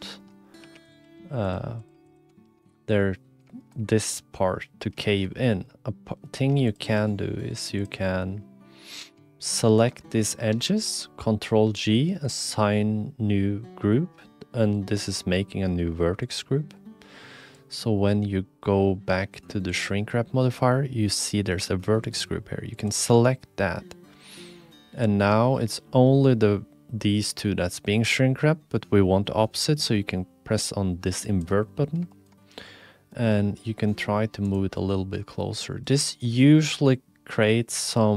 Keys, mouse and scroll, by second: 0.2 shift+click, 0.6 1, 0.8 click, 1.0 g, 1.8 click, 1.9 g, 2.4 shift+middle click, 3.0 middle click, 3.6 middle click, 4.6 click, 4.9 shift+middle click, 5.2 middle click, 5.8 click, 6.3 middle click, 6.3 2, 6.7 click, 6.9 g, 8.2 click, 10.6 ctrl+g, 16.2 click, 17.5-19.4 drag, 19.7 click, 22.1 click, 24.7 middle click, 31.3 click, 32.1 shift+middle click, 32.4-33.1 scroll up 1, 33.3 g, 34.8 click, 35.8 shift+middle click, 37.9-38.1 middle drag.